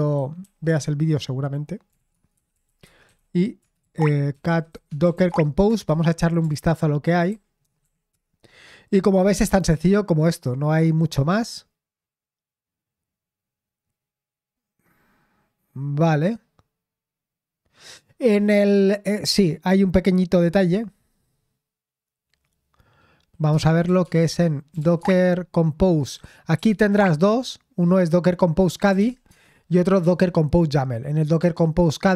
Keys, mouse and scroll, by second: 0.0-0.3 typing, 0.6 Return, 1.6-6.4 typing, 5.6 Return, 6.5 ctrl+p, 7.5-8.3 typing, 23.3-27.1 typing, 28.6-29.9 typing.